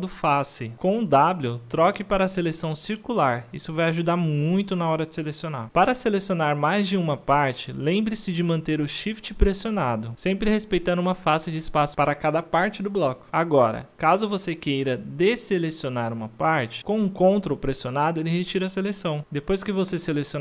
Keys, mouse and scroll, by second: 0.1-0.5 middle drag, 0.5 shift+click, 0.7-2.4 middle drag, 2.6 shift+click, 2.7 middle drag, 3.0 middle click, 3.2 shift+click, 3.3 middle click, 3.4 shift+drag, 3.7 middle click, 3.8 shift+click, 4.0 middle drag, 4.2 shift+click, 4.3-5.8 middle drag, 6.2 ctrl+z, 6.5-7.1 middle drag, 7.9 ctrl+z, 8.0 shift+middle drag, 8.3 ctrl+z, 8.5 middle click, 9.2 ctrl+z, 10.3 shift+click, 10.5-11.3 middle drag, 11.3-11.7 shift+drag, 11.7 middle click, 12.0-12.5 shift+drag, 12.5 middle click, 12.6-13.0 shift+drag, 13.0 scroll down 1, 13.0-13.8 middle drag, 14.2-14.9 middle drag, 14.9 scroll up 1, 15.1-15.7 shift+drag, 15.7 middle drag, 15.9-16.4 shift+drag, 16.4-16.7 middle drag, 17.0-17.6 shift+drag, 17.7-18.0 middle drag, 18.0-18.4 shift+drag, 18.4 scroll, 18.6-19.0 middle drag, 19.0 shift+click, 19.2-19.9 middle drag, 19.9 shift+click, 20.1-20.4 middle drag.